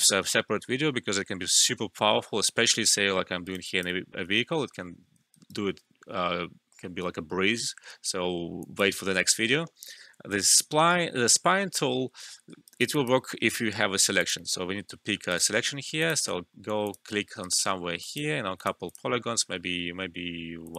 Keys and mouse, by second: 3.3 alt+middle click, 3.3 typing, 3.4 alt+right click, 3.6 alt+click, 5.3 alt+right click, 7.9 alt+middle click, 8.6 alt+click, 12.2 alt+click, 12.2 typing, 12.4 alt+middle click, 12.6 alt+right click, 12.9 alt+click, 13.3 alt+middle click, 14.2 click, 15.0 alt+middle click, 15.3 alt+right click, 16.0 click, 17.4 alt+right click, 17.7 alt+middle click, 17.8 typing, 18.0 alt+click.